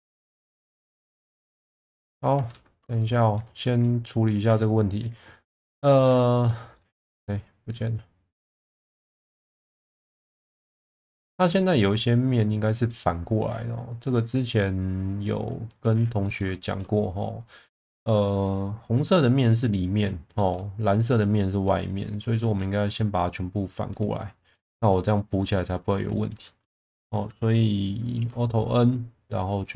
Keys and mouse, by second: 0.6-2.1 middle drag, 2.5 ctrl+z, 3.0 middle click, 3.6 middle click, 5.9 click, 6.3 shift+middle click, 6.8 middle click, 8.5 click, 9.6 click, 10.8 middle click, 11.6-12.7 middle drag, 12.9 middle click, 14.4-16.0 drag, 16.2 middle drag, 16.7 shift+middle drag, 20.4 middle drag, 21.5 middle drag, 22.4 middle drag, 23.3 middle click, 24.5-24.9 middle drag, 25.4-25.7 middle drag, 26.2 middle click, 27.0 middle click, 28.2 alt+n.